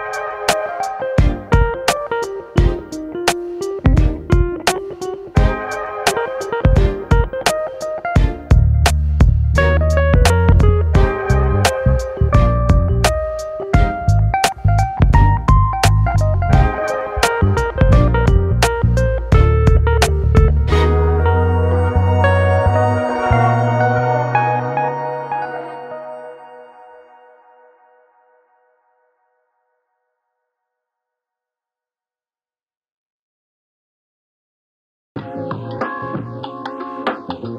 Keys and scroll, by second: 8.7 ctrl+z, 9.1 ctrl+space, 20.4 space, 33.6 space.